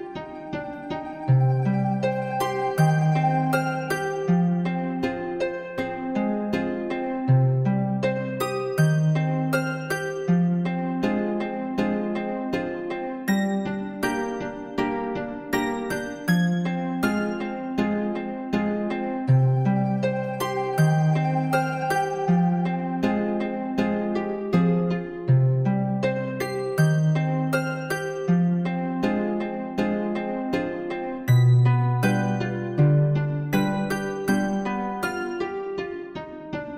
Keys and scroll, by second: 22.8 ctrl++.